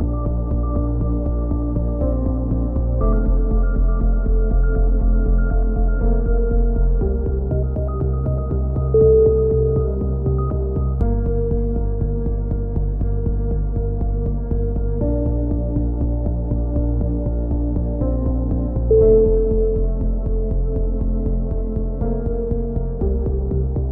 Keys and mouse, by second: 0.8 z, 2.0 click, 4.3 z, 4.8-5.8 drag, 5.9 KP_3, 9.0-12.0 middle drag, 16.9 z, 18.5 z, 18.9 z, 19.1 z, 19.9-21.2 middle drag, 22.3-23.9 middle drag, 23.3 c.